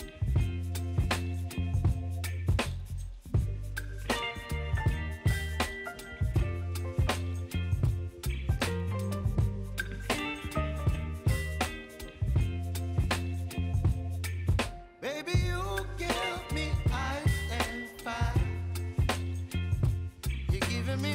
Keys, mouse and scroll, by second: 5.0 click, 10.8 click, 11.5-12.3 typing, 13.7 click, 16.8 Return, 17.9-21.0 drag.